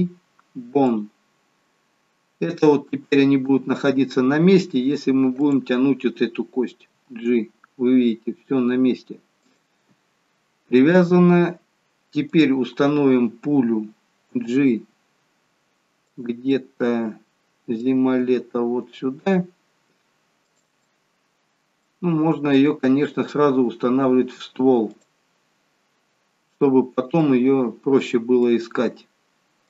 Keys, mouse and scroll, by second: 2.4 scroll up 1, 5.1-5.5 scroll down 1, 5.5 click, 7.0 g, 12.4 click, 14.4 g, 16.5 middle click, 18.3 g, 20.9 middle click, 22.3 g, 25.3 scroll down 3, 26.4-27.0 scroll down 2, 27.0 scroll down 2, 27.2 middle click.